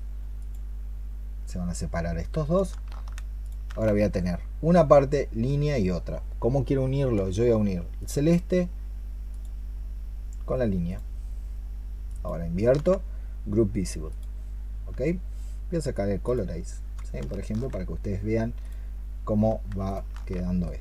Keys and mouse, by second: 3.3 ctrl+shift+click, 7.8 ctrl+shift+click, 9.2 ctrl+shift+click, 10.7 ctrl+shift+click, 11.9 ctrl+shift+click, 19.7 ctrl+shift+click.